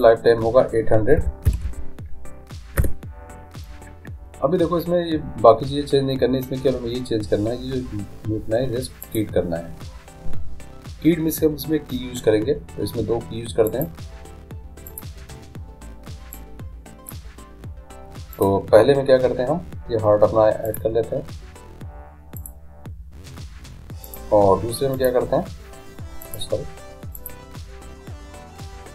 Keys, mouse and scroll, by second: 1.6 0, 9.1-10.9 drag, 13.6-18.1 drag, 18.4-20.2 drag, 20.7-22.4 drag, 24.1-26.8 drag, 27.2-28.9 drag.